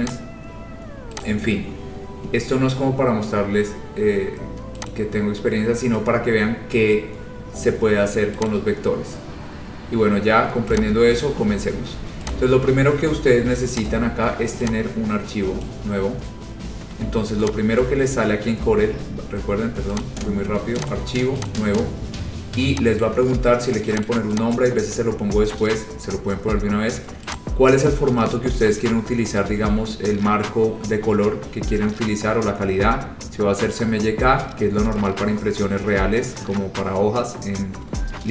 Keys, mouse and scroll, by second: 0.2 click, 0.6 scroll, 1.4 click, 1.7-4.2 scroll, 5.0 click, 5.7-7.0 scroll, 7.3 scroll, 8.0 scroll, 8.6 click, 9.0-9.8 scroll, 10.9 click, 11.7 scroll, 12.4 click, 14.0 click, 15.8 click, 17.9 click, 20.2 click, 21.0 click, 21.6 click, 23.1 click, 24.2 click, 24.6 click, 27.5 click, 30.6 click.